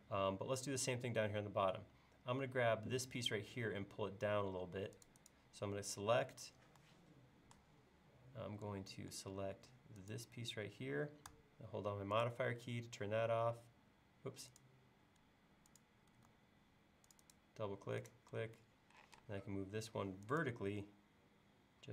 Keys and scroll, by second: 19.1 m, 20.7 Up.